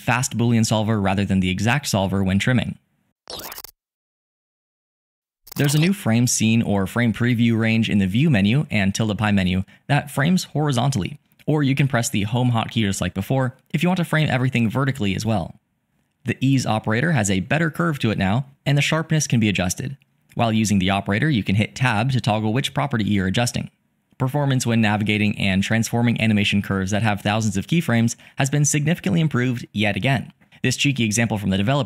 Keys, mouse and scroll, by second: 25.3-26.7 drag.